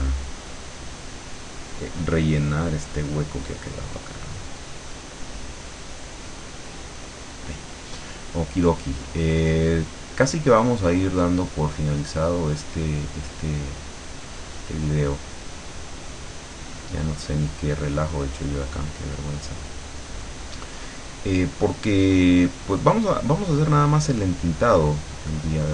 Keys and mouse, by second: 0.6 click, 2.2 click, 4.8 click, 6.4 click, 9.1-16.0 drag, 16.7-18.4 drag, 18.8 click, 21.9-25.7 drag.